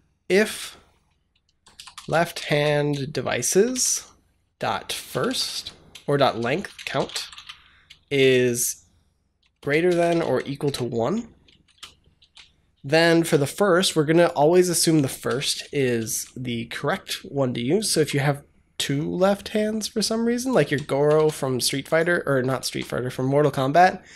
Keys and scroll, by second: 1.1-7.6 typing, 3.4 Down, 3.6 Return, 9.3-12.1 typing, 13.1 Delete, 15.2 Return, 15.5 shift+], 15.8 ctrl+s, 17.8 Tab, 20.5 ctrl+c, 21.0 BackSpace, 22.2 ctrl+v, 22.5 ctrl+s.